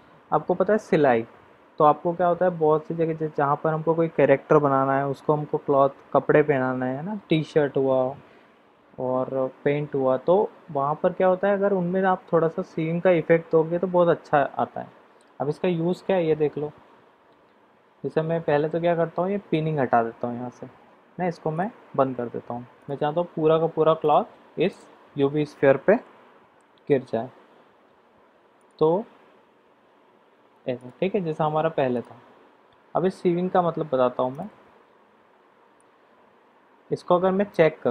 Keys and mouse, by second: 21.5 click, 24.0 click, 24.7 click, 28.6 click, 31.9 click, 34.4 click, 37.5 click.